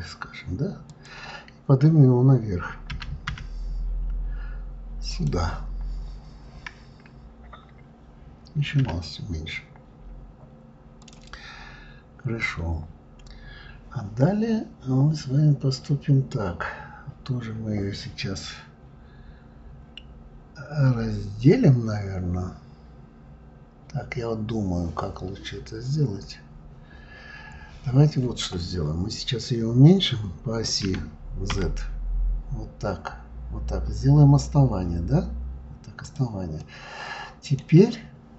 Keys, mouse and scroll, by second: 5.6-6.6 scroll up 10, 8.7 scroll up 1, 8.8 s, 30.8 s, 36.6-37.8 middle drag, 37.8-38.3 scroll down 3.